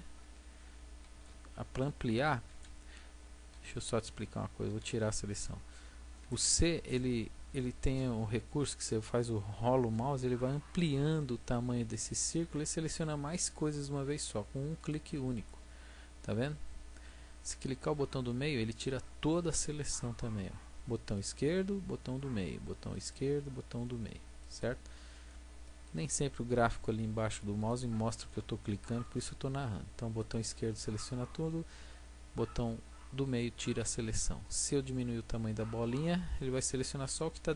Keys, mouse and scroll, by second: 4.7 a, 6.2 c.